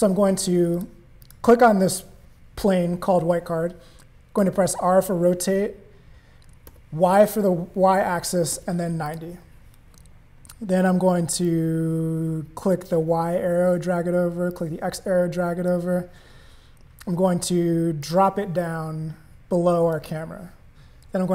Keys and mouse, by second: 0.7 click, 1.2 click, 4.6 r, 11.5-12.7 drag, 14.5-15.7 drag, 18.0-19.9 drag.